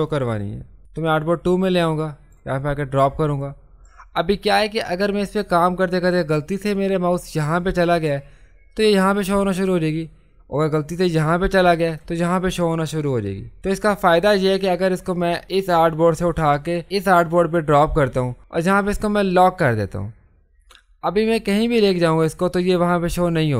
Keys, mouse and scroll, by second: 0.8-11.1 drag, 11.1-13.6 drag, 13.6 ctrl+z, 15.5-19.4 drag.